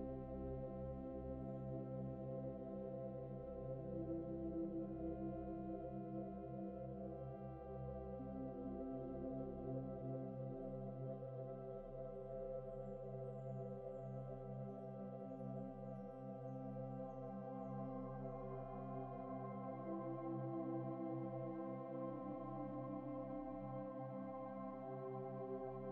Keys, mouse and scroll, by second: 6.3 double click, 7.9 ctrl+t, 8.5 shift+click, 10.0 ctrl+z, 13.4 Right, 13.5 Right, 13.7 Left, 13.9 Right, 14.0 Right, 14.6 Left, 14.7 Left, 14.9 Left, 17.7 Return, 18.0-19.0 typing, 20.4 alt+Tab, 20.7 alt+Tab, 21.3 Tab, 21.8 typing.